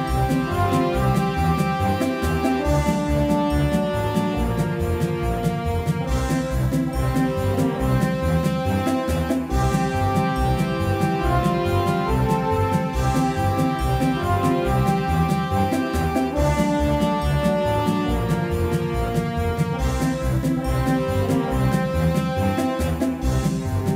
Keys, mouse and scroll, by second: 6.8 shift+a, 18.8-21.3 middle drag, 20.8 x, 22.1 shift+a.